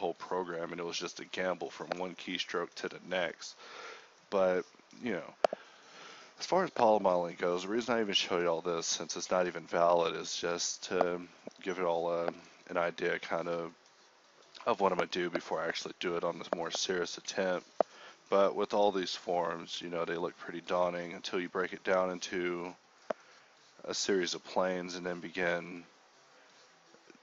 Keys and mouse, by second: 0.2-1.4 drag, 1.5 click, 1.7 g, 2.7 click, 2.7 g, 3.4 g, 3.8 g, 4.2 ctrl+r, 4.5 ctrl+r, 4.9 z, 5.2 a, 5.2 k, 6.7-8.7 typing, 9.0 ctrl+z, 10.2 s, 10.7-12.4 drag, 12.0 a, 12.5 r, 12.9 a, 13.4 ctrl+z, 14.5 ctrl+z, 14.7 g, 16.2 ctrl+b, 17.3 g, 18.0 alt+s, 18.7-21.1 typing, 23.0 g, 25.0 KP_1, 26.2 alt+m, 26.7 shift+r.